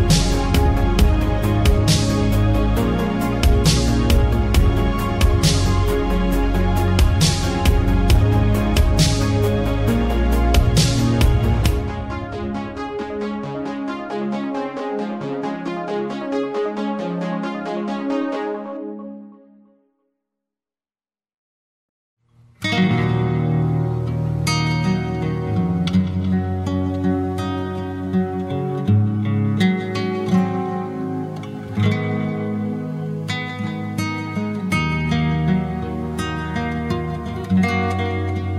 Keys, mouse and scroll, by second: 6.0-6.8 scroll down 7, 6.8-9.4 scroll up 2, 9.4 click, 10.6-13.4 drag, 13.4 g, 21.3 click, 23.1 z, 26.1 click, 27.2 click, 28.3-29.4 drag, 29.4 n, 30.3 n, 31.5-33.8 drag, 33.8 n, 35.4 click, 36.6-38.5 drag.